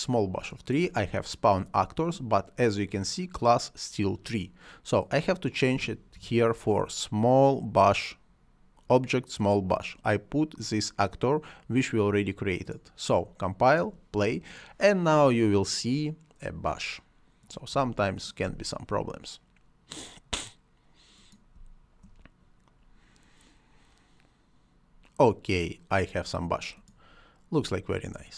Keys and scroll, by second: 5.7 s, 6.1 m, 17.6 space, 21.5 space, 27.4 space.